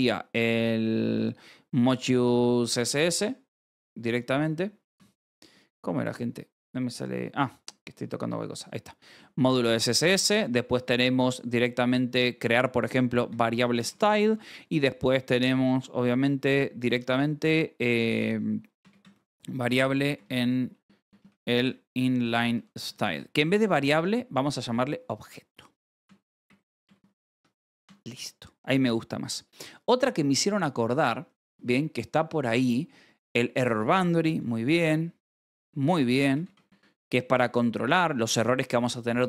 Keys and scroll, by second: 0.8 Escape, 1.1 j, 1.7 k, 3.0-5.6 typing, 3.7 Escape, 7.1 Escape, 7.6-9.5 typing, 10.9 space, 12.7-15.5 typing, 18.5-23.7 typing, 25.5-29.2 typing, 27.3 Escape, 27.8 ctrl+s, 31.2 :, 31.4 space, 33.5 shift+e, 34.9-37.1 typing, 37.2 ctrl+s.